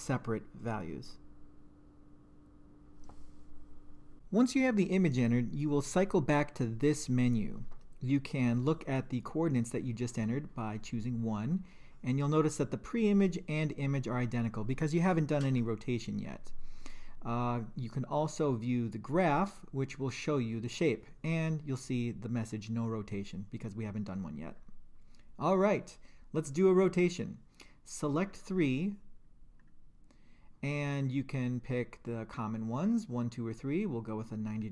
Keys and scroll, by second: 0.5 Return, 1.3 2, 1.9 Return, 2.6 2, 3.4 Return, 19.1 2, 24.5 Return, 28.3 Down, 29.6 Return.